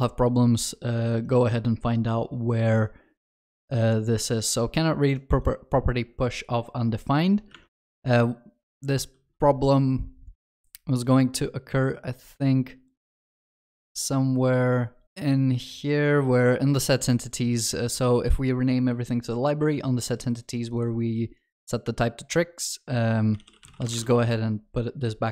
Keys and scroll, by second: 9.2 ctrl+b, 24.2 ctrl+s.